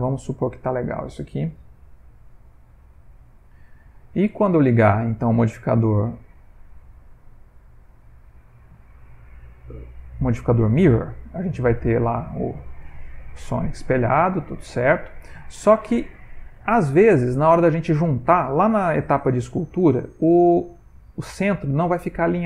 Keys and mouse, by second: 0.2 middle click, 0.3 ctrl+middle click, 1.5 z, 3.4 middle click, 5.1 click, 12.2 middle click, 13.2 Tab, 13.6 ctrl+middle click, 14.1 middle click, 14.5 ctrl+middle click, 14.9 middle click, 15.5 ctrl+middle click, 15.9 middle click, 18.7 ctrl+middle click.